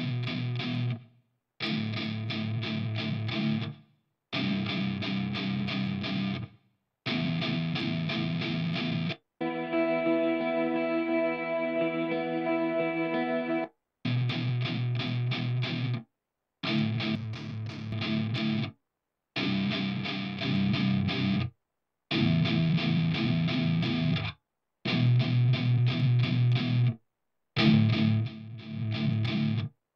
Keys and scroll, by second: 9.3 space, 9.5 space, 11.1 super+=, 13.8 space, 14.2 space.